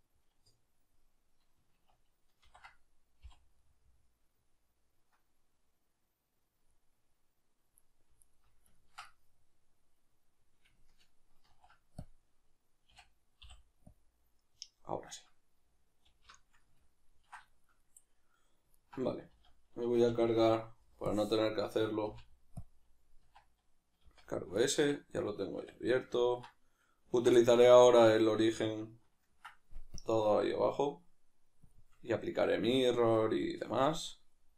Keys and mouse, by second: 2.4 ctrl+i, 8.2 alt+right click, 8.8-29.9 ctrl+middle drag, 11.5 ctrl+e, 19.3 z, 25.5 \, 29.9-32.9 drag, 32.9-34.0 shift+middle drag, 34.0 right click.